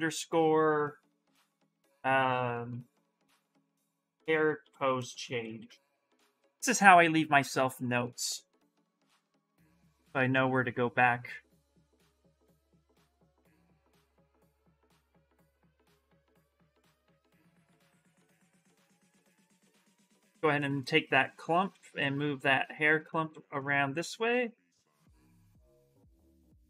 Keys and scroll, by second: 3.0-6.1 typing, 8.0 Return, 13.0 s, 15.0 ctrl+z, 16.8 s, 21.5 s, 23.9 s.